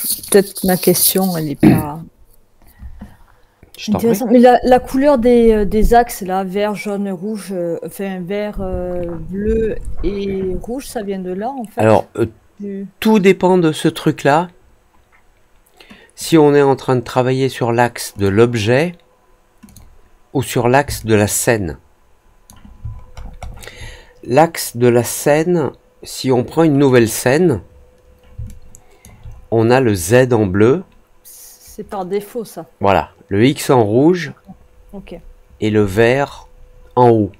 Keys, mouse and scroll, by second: 0.1 click, 0.9-1.3 drag, 16.1 click, 18.1 click, 19.6 click, 20.9-22.4 alt+drag, 22.8 alt+middle click, 23.1 alt+middle click, 26.8 click, 28.4 alt+click, 35.9-37.3 alt+drag.